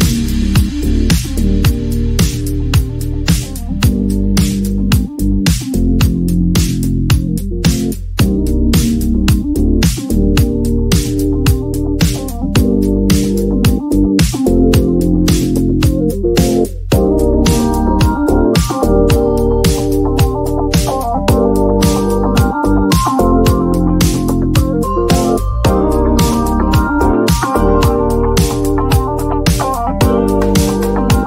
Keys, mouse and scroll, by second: 1.3 click, 3.1 click, 4.1 right click, 5.7 click, 7.7-12.3 typing, 17.3 click, 18.0-22.7 typing, 24.6 c, 25.9-28.5 drag, 30.4 click.